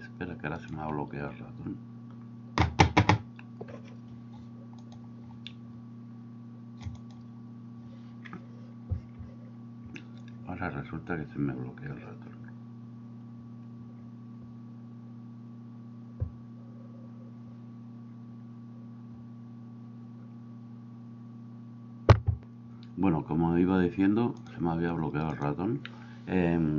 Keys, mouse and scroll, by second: 0.7 Escape, 24.5-25.5 drag.